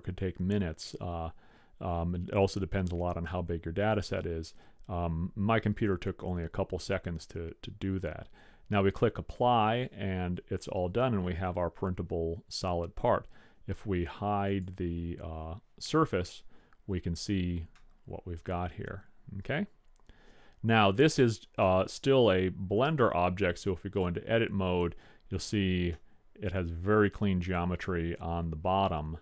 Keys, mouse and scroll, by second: 4.0-8.6 drag, 14.6-16.3 drag, 16.5-19.9 middle drag, 22.8 click, 24.2 click, 24.7 middle click, 24.9 scroll up 1, 24.9-27.9 middle drag.